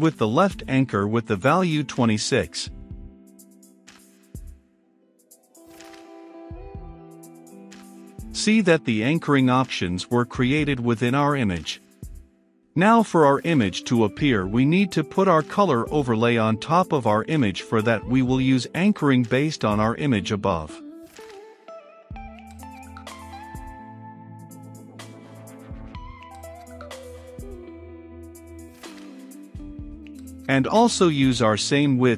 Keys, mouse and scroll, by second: 16.1-19.1 middle drag, 19.1 click, 19.7 Return, 20.0 a, 20.3 n, 20.4 c, 20.6 h, 21.3 Return, 22.1 f, 22.3 i, 22.4 l, 22.8 Return, 25.7 i, 25.8 c, 25.9 o, 26.7 Down, 26.9 Return, 27.8-31.0 drag, 31.0 Return, 31.7-32.1 typing.